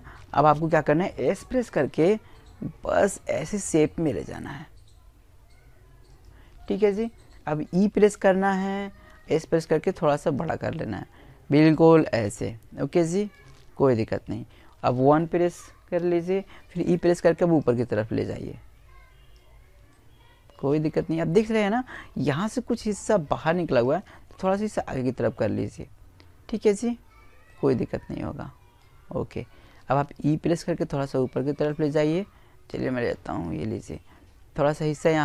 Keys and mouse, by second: 3.9 click, 5.5 e, 6.0-7.8 right drag, 7.0 s, 8.2 click, 10.0 right click, 12.0 KP_1, 14.3 e, 14.7-16.5 right drag, 15.3 click, 17.7-20.1 middle drag, 21.5 click, 25.2-27.3 middle drag, 27.3 middle click, 28.3 e, 29.6-31.4 right drag, 30.4 click, 31.6 right click, 32.0 click, 32.1 click, 32.2-34.6 middle drag, 34.6 click.